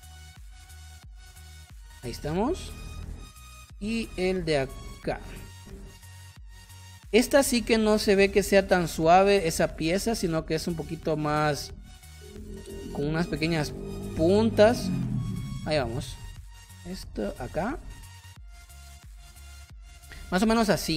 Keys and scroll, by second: 15.1 space, 20.1 space.